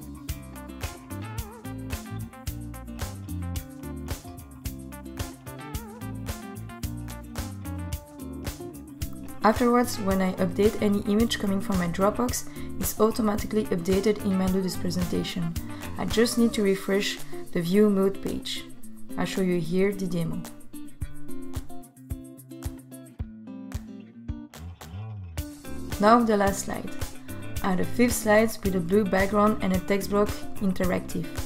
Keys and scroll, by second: 21.4 Return, 29.7 t.